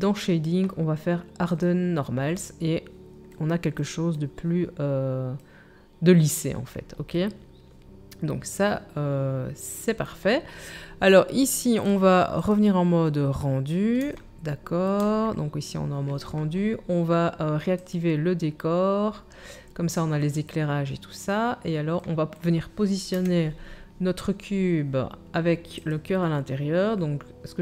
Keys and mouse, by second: 1.7-11.9 drag, 11.9-18.0 middle drag, 18.0-25.7 drag, 23.1 KP_1, 25.7-27.6 middle drag.